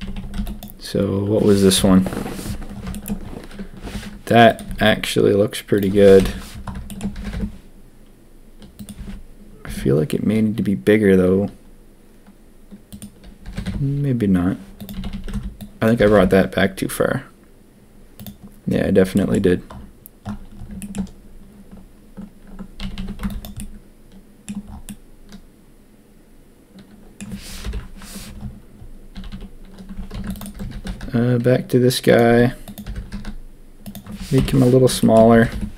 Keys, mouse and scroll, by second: 0.0 a, 0.1 a, 0.3 b, 1.7 ctrl+KP_1, 2.9 shift+click, 3.8 g, 4.6 s, 6.1 ctrl+KP_3, 7.1 g, 8.9 s, 13.4 g, 14.9 a, 15.1 a, 15.3 b, 15.9 g, 19.1 shift+middle click, 19.4-20.5 middle drag, 20.8 shift+middle click, 22.8 a, 22.9 a, 23.2 b, 23.5 click, 24.8-27.1 drag, 27.6 ctrl+KP_1, 29.1 a, 29.3 a, 30.1 ctrl+r, 30.6 g, 32.3 s, 32.8 g, 34.3 ctrl+KP_3, 35.3 g.